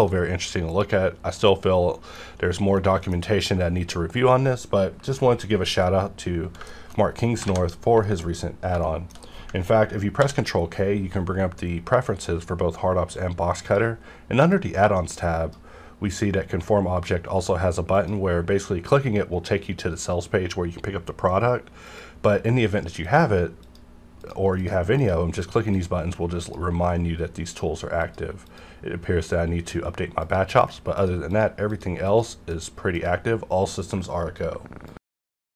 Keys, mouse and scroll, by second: 1.4-4.4 middle drag, 4.4-5.7 scroll down 1, 6.6 shift+Num_Lock, 6.6 scroll down 1, 6.7-7.4 shift+middle drag, 7.4 alt+a, 8.0 shift+middle click, 8.8 shift+middle click, 10.2 ctrl+k, 12.0-17.9 drag, 21.8 click.